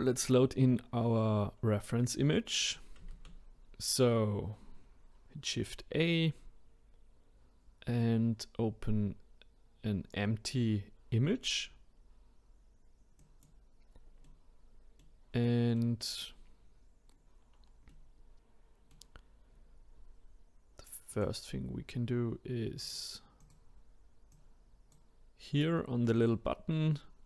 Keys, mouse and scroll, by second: 0.9-3.1 scroll down 1, 3.1 shift+a, 14.2-16.6 middle drag, 16.6-17.1 scroll up 1, 17.1-17.9 scroll down 1, 17.9-21.1 middle drag, 21.1-22.9 drag, 23.4 click, 24.3-27.2 drag.